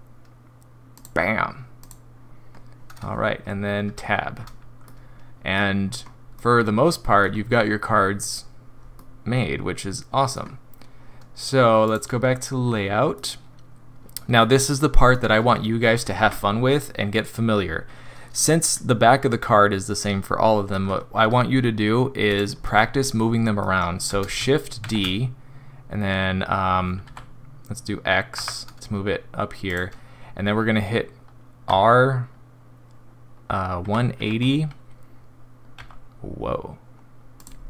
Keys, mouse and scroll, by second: 1.8 click, 3.8 Tab, 4.3-4.8 scroll down 3, 5.0 middle click, 5.1 middle click, 5.2 middle click, 5.8 scroll up 3, 6.3 middle click, 9.0 middle click, 9.8 middle click.